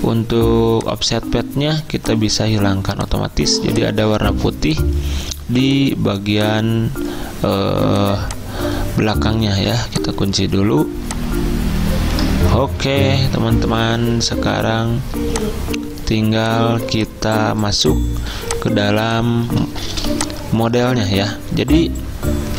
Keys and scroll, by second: 3.6 z, 5.5 v, 9.6 ctrl+2, 13.0 ctrl+z, 16.7 z.